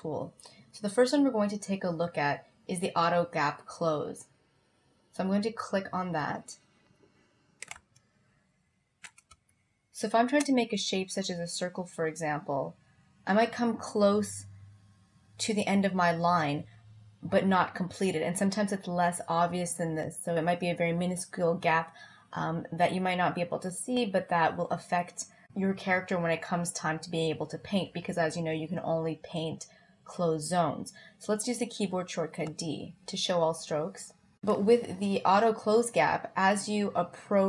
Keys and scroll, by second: 9.4 space, 32.6 d.